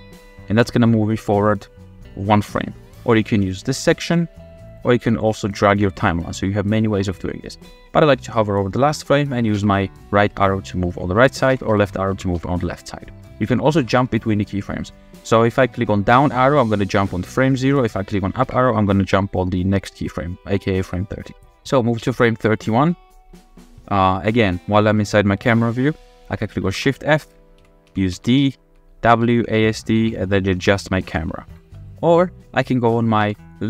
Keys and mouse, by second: 4.1 click, 5.8-8.5 drag, 9.5 Right, 11.5 Left, 11.8 Left, 12.1 Right, 12.4 Right, 13.8 Down, 16.2 Down, 18.5 Up, 20.4-20.8 middle drag, 22.0 Right, 23.3 click, 23.3 middle click, 26.7-31.1 typing, 31.5 click, 31.9 click, 33.2 f, 33.5-33.6 drag.